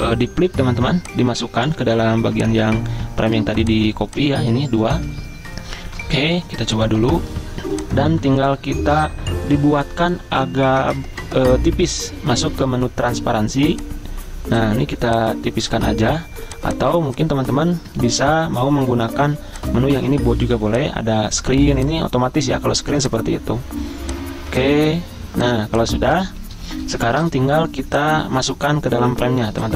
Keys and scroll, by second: 0.0 v, 4.9 ctrl+z, 5.9 ctrl+g, 18.0 ctrl+z, 26.8 Escape.